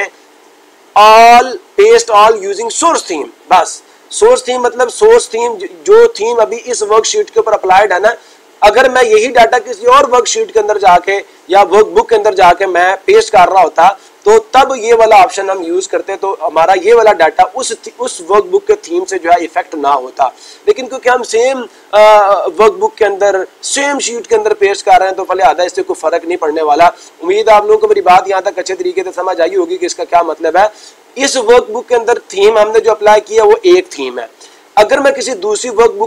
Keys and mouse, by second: 0.0 click.